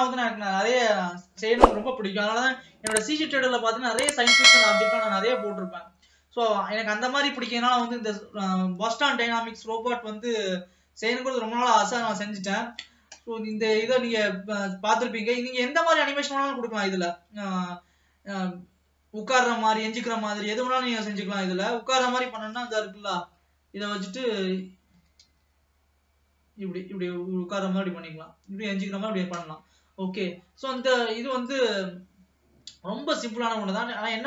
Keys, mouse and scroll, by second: 2.7-3.7 scroll down 1, 3.7-4.1 scroll down 1, 4.1-5.3 drag, 5.3-6.8 middle drag, 6.8-9.6 scroll up 1, 9.6 scroll up 1, 22.8 space, 23.9 click, 25.1 g, 30.6 space, 31.3 ctrl+s, 31.6 click.